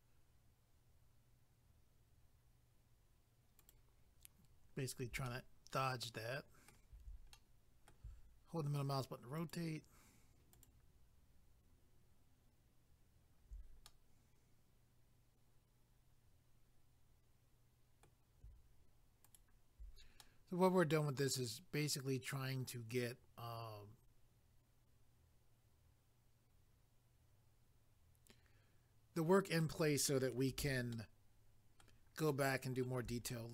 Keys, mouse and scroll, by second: 3.6 ctrl+right click, 5.3 middle click, 7.4 middle click, 9.4 ctrl+right click, 13.9 middle click, 19.3 ctrl+right click, 20.2 middle click, 30.9 shift+middle click, 32.3 shift+middle click, 33.3 middle click.